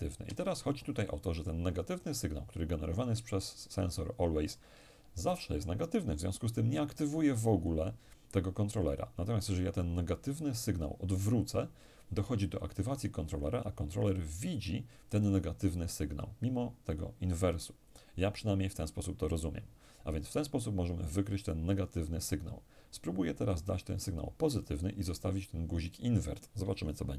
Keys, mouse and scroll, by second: 23.6 click, 26.8 p.